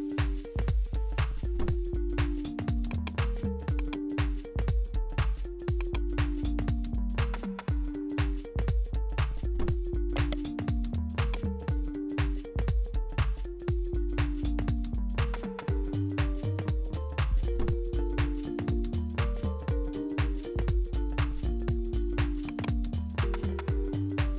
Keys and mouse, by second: 0.7-3.0 drag, 7.9-10.1 drag, 10.1 right click, 11.1-17.5 drag, 18.1-22.6 drag.